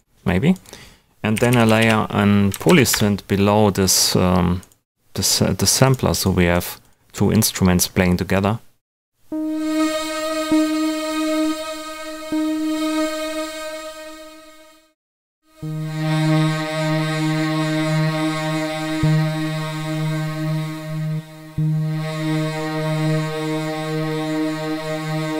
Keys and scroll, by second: 1.1-2.3 typing, 2.5 Down, 2.9 Return.